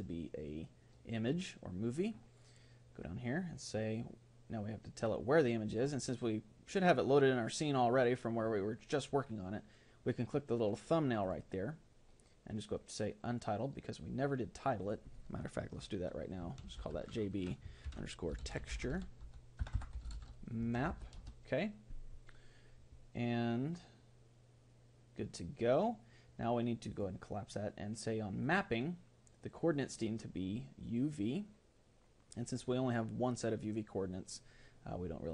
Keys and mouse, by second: 4.0-7.6 drag.